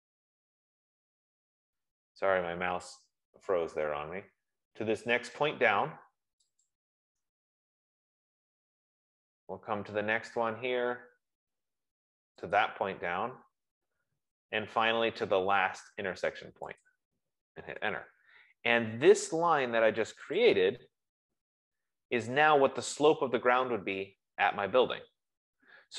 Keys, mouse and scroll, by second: 2.3 scroll, 7.1 click, 8.2-9.3 scroll, 10.0-10.8 scroll, 12.9 click, 13.7-14.3 scroll, 15.0-15.3 scroll, 15.8 scroll, 17.2 click, 18.2 Return, 20.2 F15, 20.9 click, 22.2 scroll, 23.4 scroll.